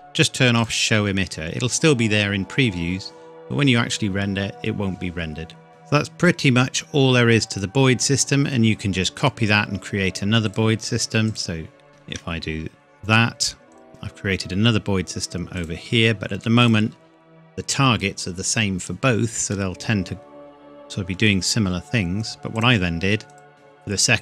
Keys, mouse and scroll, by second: 0.6 click, 5.7 middle click, 8.6-9.3 scroll down 1, 10.5 click, 11.9 shift+d, 13.7 click, 19.5 middle click, 19.7 scroll down 1, 19.8-20.7 scroll up 1, 21.2 scroll down 1, 21.5-22.3 scroll up 1, 22.5 click, 23.5-23.9 scroll down 1, 23.9-24.2 scroll up 1.